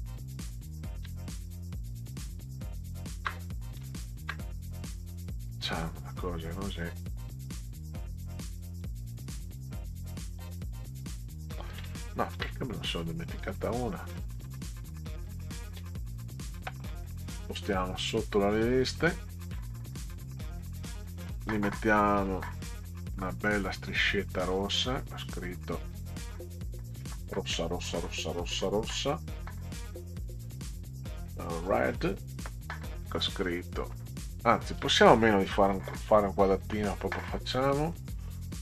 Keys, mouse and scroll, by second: 0.0 shift+click, 1.8 shift+click, 4.0 shift+click, 9.0-10.8 drag, 12.4 ctrl+z, 13.6 shift+click, 17.6 Down, 19.8 Up, 20.0 Up, 20.5 Up, 23.2 click, 24.5-25.7 drag, 29.0 click, 31.7 click, 36.8 BackSpace, 37.7 click, 37.8 middle click.